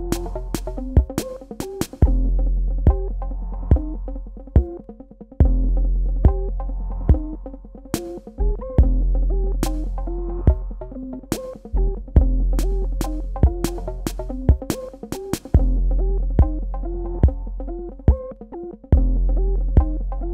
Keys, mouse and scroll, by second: 1.1 shift+click, 4.4 click, 9.0 z, 13.0 click.